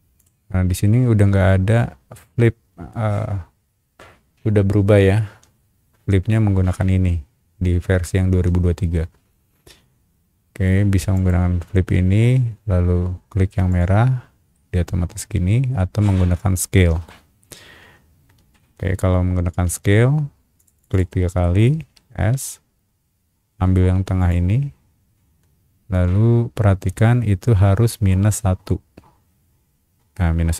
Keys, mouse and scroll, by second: 0.2 ctrl+right click, 11.1 click, 13.7 click, 14.5-16.1 middle drag, 18.8 space, 19.9 ctrl+z, 20.6 click, 20.7 click, 20.9 click, 21.4 middle click, 22.1 s, 24.2 click.